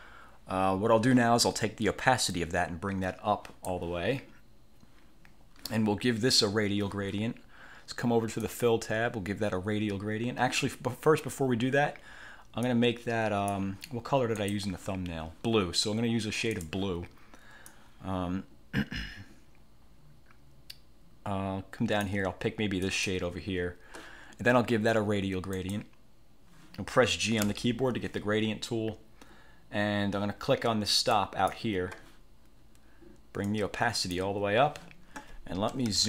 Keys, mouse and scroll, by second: 2.5 click, 8.5 click, 12.7-13.8 drag, 14.5 click, 16.7 click, 17.8-22.3 drag, 22.9 click, 25.7 click, 27.5 g, 31.2 click, 33.5 click, 35.8 =.